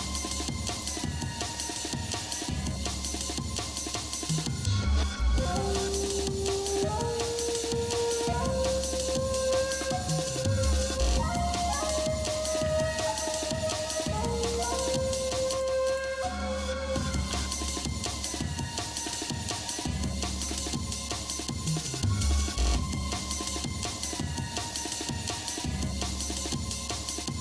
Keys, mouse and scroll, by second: 1.8 g, 4.5-5.8 shift+middle drag, 7.2-8.6 shift+middle drag, 9.6 ctrl+Tab, 10.6 click, 11.3 alt+shift+click, 12.3 g, 14.4 ctrl+Tab, 15.5 click, 15.9 alt+shift+click, 17.3 s, 19.2 e, 20.4 alt+s, 25.1-27.4 shift+middle drag.